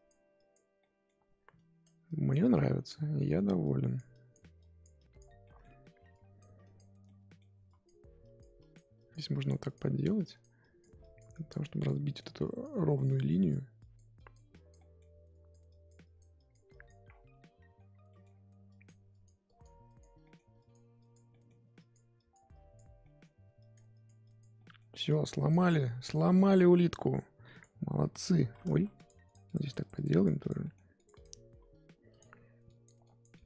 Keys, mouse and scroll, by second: 0.8 middle click, 1.5-3.1 drag, 3.1 middle click, 3.6-5.4 drag, 5.4 middle click, 6.1 click, 7.0 middle click, 7.6-9.8 drag, 9.8 middle click, 10.2-12.0 drag, 12.0 middle click, 12.4 click, 12.7 middle click, 13.2-14.7 drag, 14.7 middle click, 15.3-17.0 drag, 17.0 scroll down 1, 17.3 middle click, 17.9 scroll up 2, 18.1 middle click, 18.7-20.2 drag, 20.2 middle click, 20.6 click, 21.3 middle click, 21.7-23.0 drag, 23.0 middle click, 23.2-23.6 scroll up 2, 23.6 click, 24.5 middle click, 25.1 click, 25.6 middle click, 25.9 click, 26.4-27.6 middle drag, 27.6-28.7 drag, 28.7 ctrl+z, 28.9-30.6 drag, 30.6 middle click, 30.9-33.4 drag.